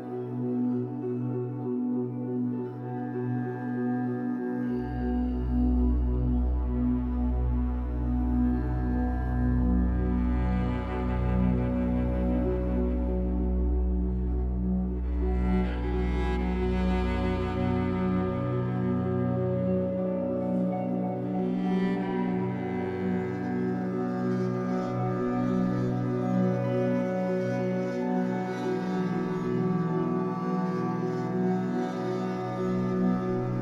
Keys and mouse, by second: 0.5 click, 1.4 typing, 1.9 Return, 3.2 click, 3.6 space, 5.2 space, 6.9 click, 7.3 click, 8.5 click, 9.6-10.0 typing, 10.2 Return, 11.4 click, 11.7 space, 15.1 space, 15.8-16.9 alt+drag, 18.2 click, 19.2-19.8 drag, 21.1 click, 23.0 click, 25.2-27.5 shift+drag, 30.9-33.6 shift+drag.